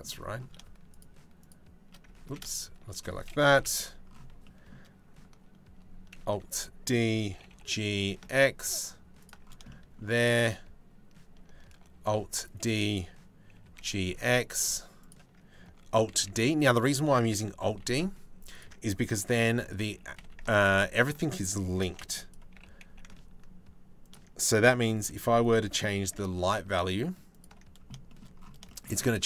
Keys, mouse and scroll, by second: 1.0 shift+click, 1.9 ctrl+z, 2.1 shift+click, 3.1 KP_7, 4.0 shift+middle click, 5.8 alt+d, 6.9 g, 9.3 shift+click, 11.6 alt+d, 13.1 g, 15.7 alt+d, 17.0 g, 18.9 alt+d, 19.5 g, 21.5 alt+d, 22.1 g, 24.7 alt+d, 25.2 g, 27.7 shift+g.